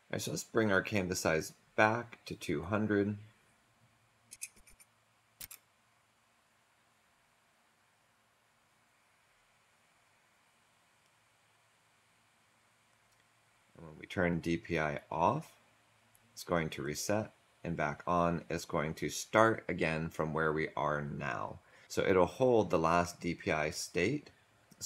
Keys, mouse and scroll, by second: 4.2 2, 4.5 0, 5.3 0, 7.1 Return.